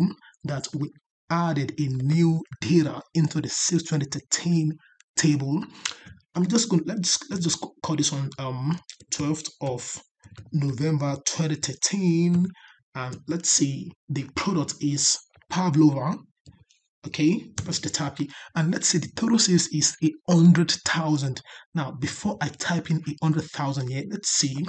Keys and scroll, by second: 0.0 ctrl+Up.